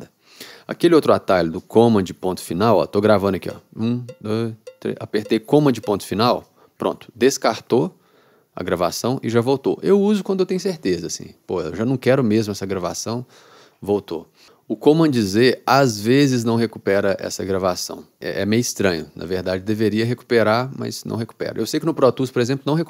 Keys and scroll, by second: 3.5 r, 6.5 super+..